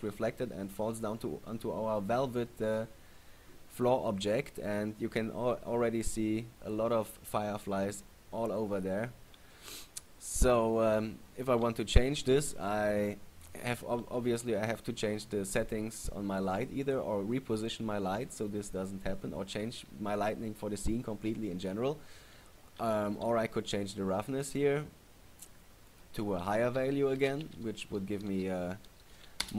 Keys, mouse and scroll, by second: 23.3 right click, 26.1 click.